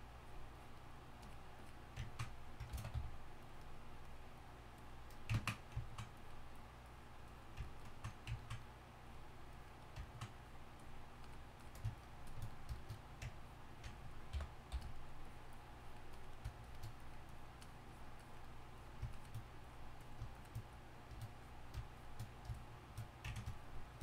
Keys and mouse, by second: 2.7 shift+c.